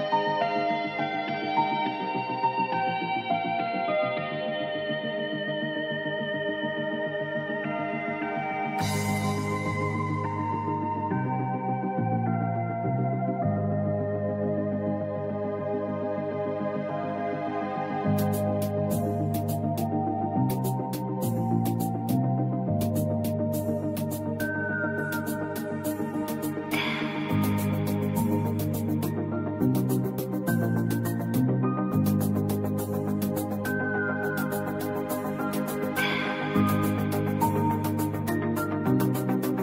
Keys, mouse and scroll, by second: 1.7 click, 3.6-5.3 drag, 6.5 i, 7.0 click, 7.7 v, 8.0 click, 9.4 ctrl+2, 10.1 click, 11.9 right click, 12.3-15.3 drag, 19.0 right click, 19.5-20.6 drag, 29.2 ctrl+2, 32.1 ctrl+z, 32.7 click, 33.2 v, 33.6 click, 36.3 click.